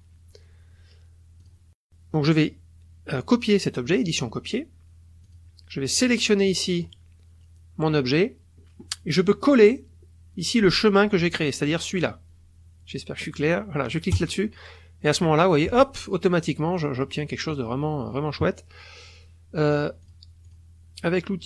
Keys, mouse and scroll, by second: 1.4 click, 4.0 click, 5.2 click, 6.0 click, 6.5 click, 7.0-10.7 middle drag, 14.2 click, 15.3 click, 15.8-19.7 middle drag, 19.7 click, 20.0 click, 20.5 click.